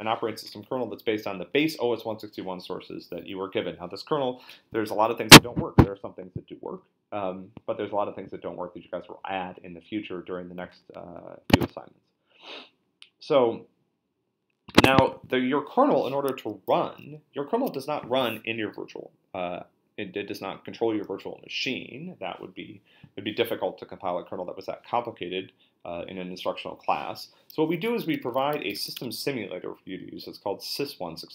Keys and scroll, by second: 11.5 super+Tab, 14.7 super+Tab, 27.9-29.2 typing.